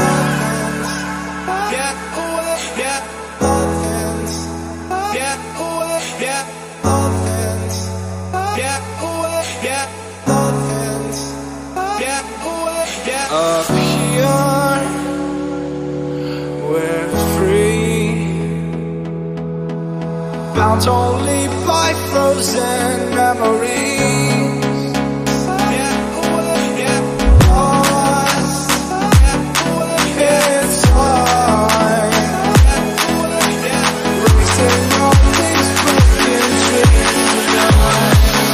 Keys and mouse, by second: 17.7-27.1 drag, 27.1 g, 27.8 g, 31.7 click, 31.9 m, 32.6 g, 37.4 g.